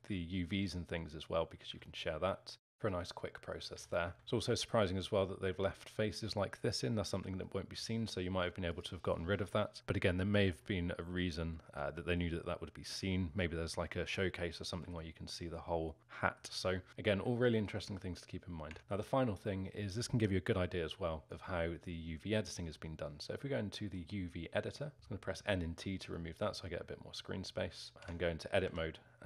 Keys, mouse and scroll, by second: 0.3-3.7 alt+middle drag, 3.7 z, 4.1-5.1 alt+middle drag, 7.4-8.7 alt+middle drag, 8.7 click, 10.6-13.6 alt+middle drag, 14.9-16.9 alt+middle drag, 16.9-17.4 scroll down 1, 17.4 alt+middle click, 17.8 Tab, 18.7 Tab, 18.8-21.2 alt+middle drag, 21.2 click, 22.6-23.4 scroll up 10, 23.4-24.9 middle drag, 24.9 t, 25.8-26.2 scroll up 3, 26.2-28.1 middle drag, 28.1 Tab, 28.7 a.